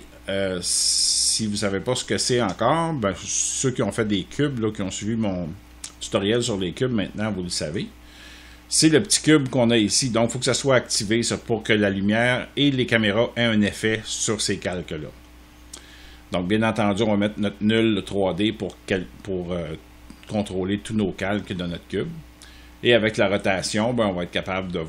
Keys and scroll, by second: 2.1 space.